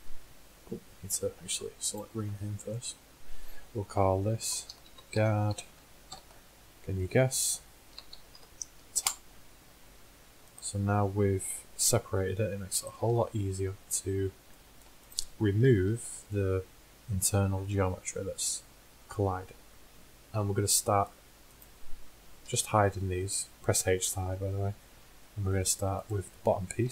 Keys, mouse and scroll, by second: 10.6-12.5 drag, 12.5 h, 13.3 h, 15.7 z, 18.9 middle click, 22.6 h, 25.8-26.9 middle drag.